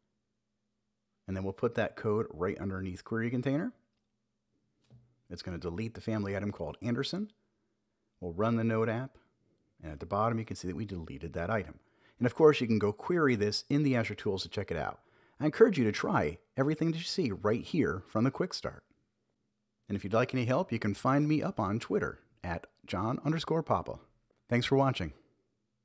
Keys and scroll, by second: 4.1 super+v, 4.7 super+s, 6.6 super+j, 7.1 Up, 7.7 Return, 11.6 Return.